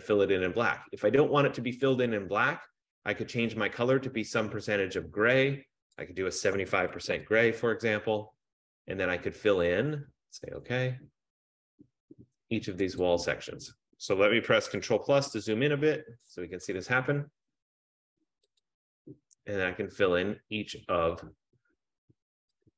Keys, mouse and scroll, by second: 2.0 click, 2.2 click, 6.2 click, 6.6 typing, 7.2 Tab, 10.7 click, 13.2 click, 15.5 ctrl+=, 16.3 ctrl+=, 16.3 ctrl+F15, 18.9 click, 21.3 click.